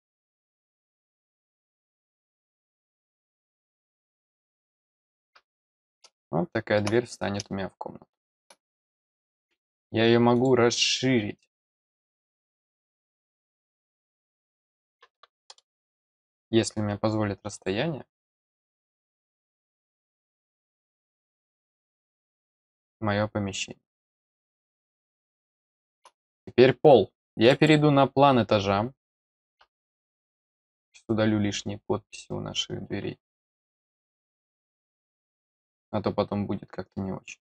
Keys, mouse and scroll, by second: 0.3-1.0 scroll up 3, 1.7-2.5 scroll up 1, 2.5 click, 4.1 click, 6.1 middle click, 7.4-8.4 middle drag, 9.1 click, 10.3 click, 13.6 click, 17.5 click, 21.9-25.9 middle drag, 26.2 scroll up 1, 27.4 click, 28.8-29.2 scroll up 2, 30.4 click, 32.1 click, 33.6 click.